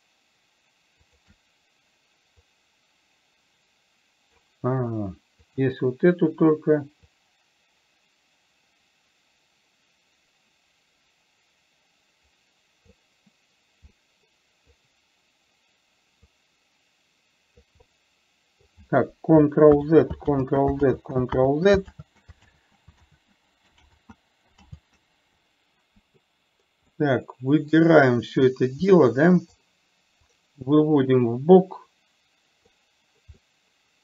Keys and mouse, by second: 1.4 shift+click, 2.8-4.8 drag, 5.8 click, 7.7-13.3 drag, 14.4 middle click, 16.9-18.0 drag, 18.2-19.2 middle drag, 20.2 ctrl+z, 21.4 ctrl+z, 21.8 ctrl+z, 22.4 ctrl+z, 22.9 ctrl+z, 23.5 ctrl+z, 24.3 ctrl+z, 25.2 ctrl+z, 27.3-28.2 middle drag, 29.3-29.9 middle drag, 30.8-33.2 drag, 33.8-34.0 middle drag.